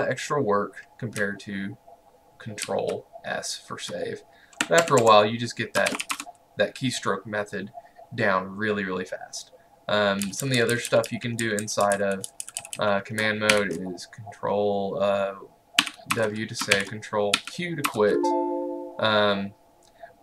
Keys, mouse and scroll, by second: 1.2 ctrl+Num_Lock, 2.7 ctrl+s, 4.8 Escape, 5.8-6.6 typing, 10.0-13.8 typing, 15.8-17.9 typing, 16.2 Return, 17.9 Return.